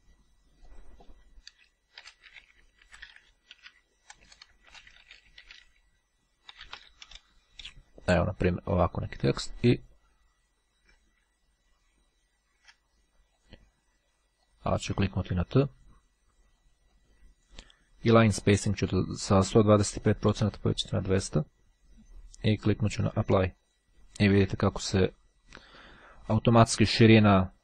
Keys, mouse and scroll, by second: 0.0 click, 0.8 click, 1.9-6.9 typing, 9.8 click, 10.4-10.8 scroll down 2, 10.8-11.4 scroll up 2, 11.6-12.7 shift+scroll down 1, 13.4 click, 14.5 click, 17.1-18.1 drag, 18.5 click, 19.9-21.2 drag, 23.6 click.